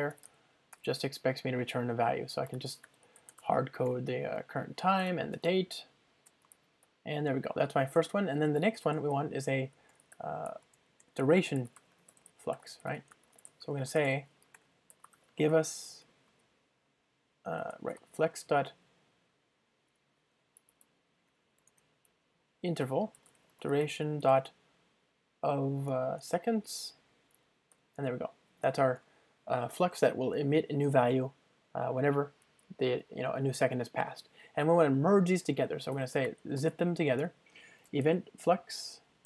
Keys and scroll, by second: 1.0 super+p, 5.5 Return, 14.5 alt+BackSpace, 21.8 ctrl+space, 29.0 Return, 31.0 ctrl+alt+shift+Right, 37.2 Return.